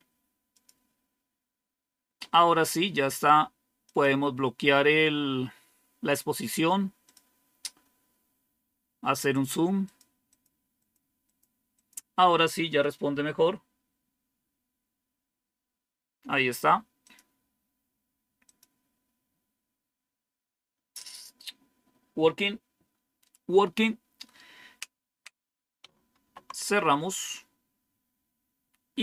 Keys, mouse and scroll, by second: 0.4 click, 3.7 click, 6.9 click, 9.1-11.8 drag, 16.9 click, 18.3 click, 18.9 click, 26.1 super+w.